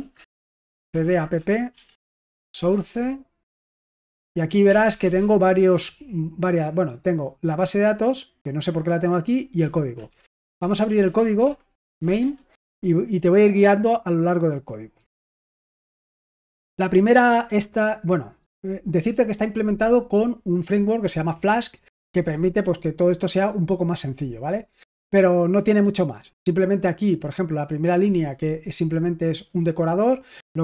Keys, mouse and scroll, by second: 0.0-5.2 typing, 1.9 Tab, 9.7-12.2 typing, 15.3 ctrl+d, 15.8-16.8 j, 17.1 j, 17.4 j, 18.4 k, 25.7-26.1 typing.